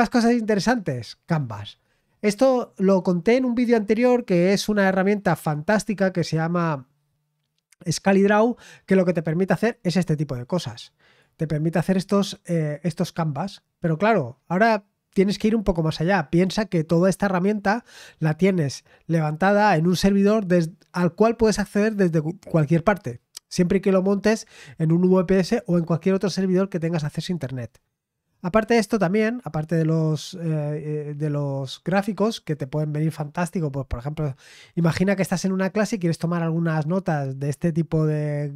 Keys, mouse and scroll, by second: 1.3-1.6 scroll down 1, 1.9-9.6 scroll up 2, 9.6-11.5 drag, 29.0-29.4 scroll down 1.